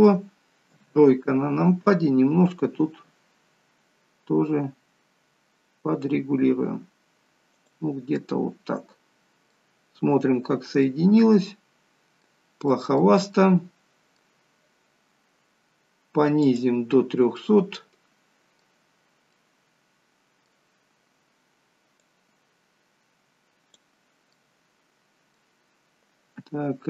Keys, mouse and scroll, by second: 0.7 KP_3, 2.8 r, 8.2 middle click, 9.8-10.2 scroll up 5, 10.5-10.8 scroll down 2, 10.8 middle click, 13.5 middle click, 14.4 scroll down 1, 17.4 middle click, 19.3 middle click, 22.0 click, 24.4 middle click.